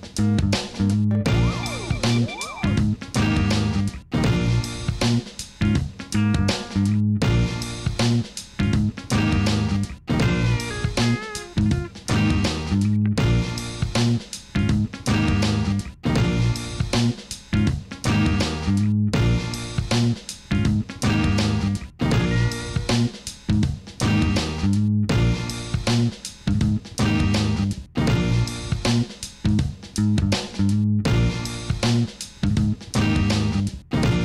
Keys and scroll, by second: 5.8 Tab, 10.1 g, 10.1 y, 11.6 r, 11.7 9, 12.0 Return, 14.4 g, 14.6 x, 15.8 Tab, 16.8 Tab, 19.6 Tab, 20.1 r, 20.2 9, 20.7 Escape, 21.4 r, 21.6 9, 21.8 Return, 22.2 Tab, 23.6 ctrl+z, 24.2 Tab, 27.1 Tab, 28.8 g, 28.9 y, 31.0 alt+a, 32.1 Tab, 34.0 Tab.